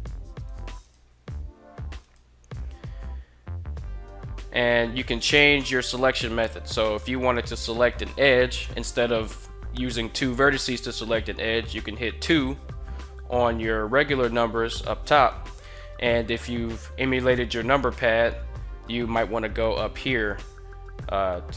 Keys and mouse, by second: 0.1 right click, 0.6 shift+right click, 1.8 right click, 12.0 2.